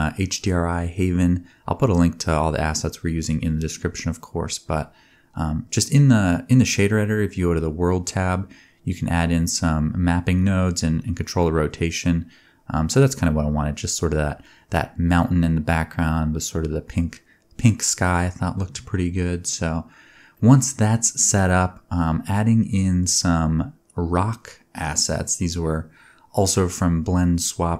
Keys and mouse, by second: 10.5 middle click, 11.4 click, 11.7 middle drag, 11.9-25.2 drag, 25.2 middle click, 25.7 click, 25.7 middle click, 26.5-27.7 drag.